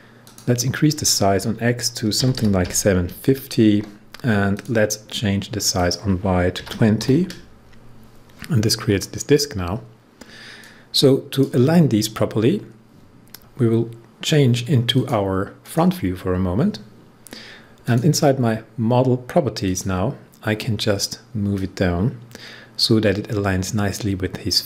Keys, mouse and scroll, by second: 0.2 click, 1.9-3.0 typing, 3.6 Tab, 4.5 click, 6.5-6.9 typing, 10.5-14.0 drag, 14.8-24.6 drag.